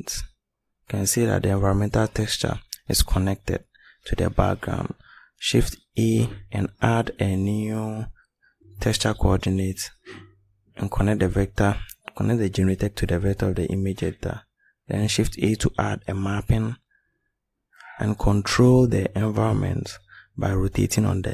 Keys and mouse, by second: 2.0 shift+a, 3.8 click, 4.5 click, 8.7 shift+a, 15.7 click, 19.2 click.